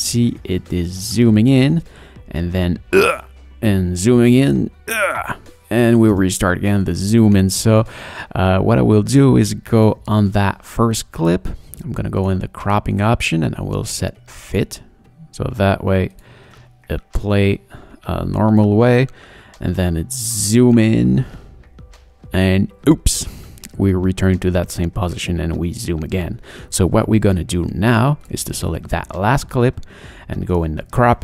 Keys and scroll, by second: 1.6 space, 5.8 space, 16.4 space, 26.4 space.